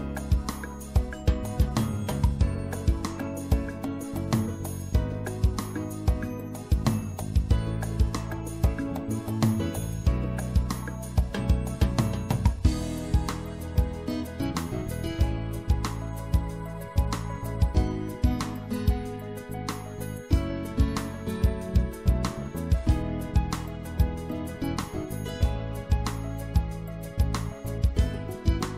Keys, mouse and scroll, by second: 2.5 middle click, 2.8-6.0 middle drag, 4.0 c, 8.1-10.2 middle drag, 9.9 i, 12.1 e, 13.6-15.3 middle drag, 15.3 click, 15.4 middle click, 17.1 click, 17.9-19.1 middle drag, 19.1 ctrl+z, 19.5 ctrl+z, 21.7-23.1 drag, 23.1 middle click, 24.1 e, 25.2-26.9 drag, 28.3-28.7 drag.